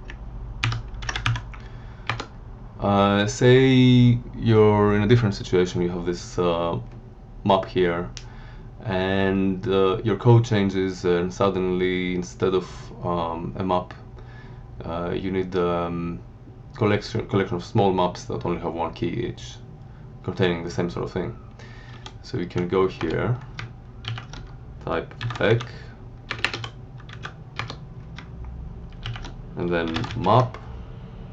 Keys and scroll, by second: 0.6 ctrl+g, 1.0 ctrl+x, 1.2 b, 2.0 Return, 21.9 Down, 22.4 End, 23.0 Return, 24.0 alt+shift+9, 24.9-27.0 typing, 27.5 Return, 29.0 alt+shift+9, 29.6-30.5 typing.